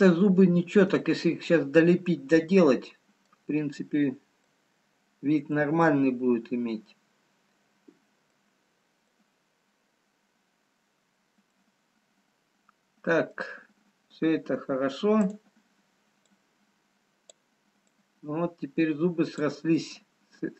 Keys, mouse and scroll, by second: 1.0 middle click, 2.2 middle click, 4.6 middle click, 4.6-5.8 scroll down 5, 7.0 middle click, 8.4 middle click, 12.0-12.5 scroll up 2, 14.2 middle click, 15.7 click, 16.5 click.